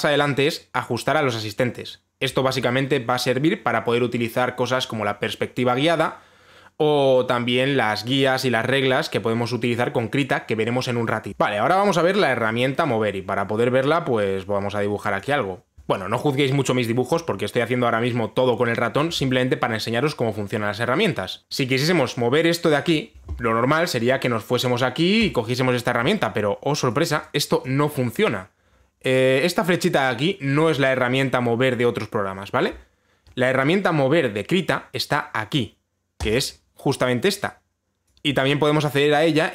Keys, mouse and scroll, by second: 11.6 click, 11.8 ctrl+z, 26.0 click, 27.5 click, 27.8 click, 28.3 click, 36.9 click, 38.7 click.